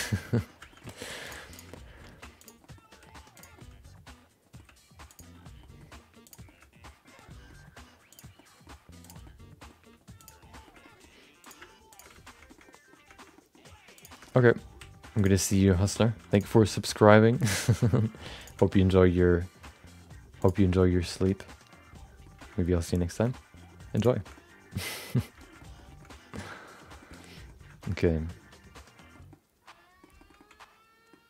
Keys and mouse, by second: 0.2 middle click, 0.7 middle click, 1.2 click, 1.5 shift+click, 1.7 middle click, 2.1 g, 2.7 middle click, 2.9 r, 3.7 middle click, 5.1 click, 5.6 middle click, 6.2 click, 6.4-7.4 shift+middle drag, 7.6 g, 8.4 middle click, 9.0 click, 9.2 middle click, 9.8 g, 10.7 middle click, 11.4 click, 11.9 shift+click, 12.1 f, 12.5 shift+middle click, 12.6 middle click, 13.2 shift+middle click, 13.3 middle click, 13.9 click, 14.2 shift+middle click, 14.5 middle click, 14.7 r, 15.6 middle click, 16.0 g, 16.7 middle click, 17.4 g, 17.9 middle click, 18.4 click, 18.8 middle click, 19.6 g, 20.7 middle click, 21.3 middle click, 22.6 middle click, 23.2 middle click, 23.9 click, 24.4 middle click, 25.6 middle click, 26.1 middle click, 26.7 middle click, 27.2 middle click, 27.9-29.2 middle drag, 29.4 middle click, 30.2 shift+middle click, 30.5 middle click.